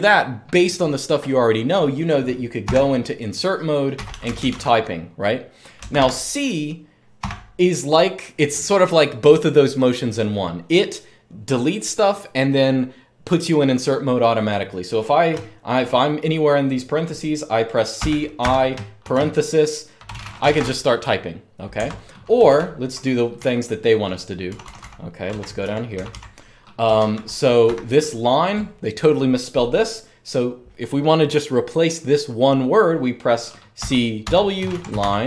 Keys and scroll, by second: 2.4 typing, 3.5-7.0 typing, 8.1-8.9 typing, 15.1-15.6 typing, 17.7-23.6 typing, 21.6 Escape, 24.8-27.4 typing, 33.3-35.2 typing.